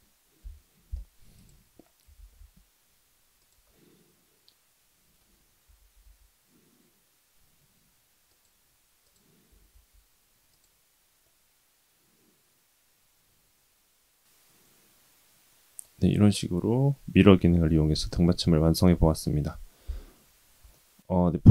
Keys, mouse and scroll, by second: 0.4 KP_1, 1.3 click, 2.1 shift+d, 3.7-5.2 middle drag, 5.6 r, 9.0 click, 9.5 r, 11.2-15.9 middle drag, 20.4-21.2 scroll down 2, 20.7-21.2 middle drag, 21.3-21.5 scroll up 3.